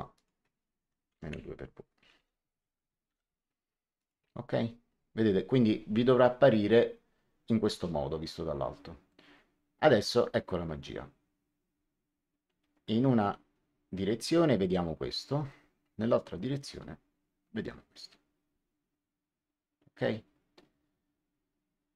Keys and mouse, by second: 0.1 click, 1.0 KP_Subtract, 1.2 KP_2, 1.9 KP_Multiply, 2.1 w, 3.0 Return, 3.0 KP_Enter, 3.9 click.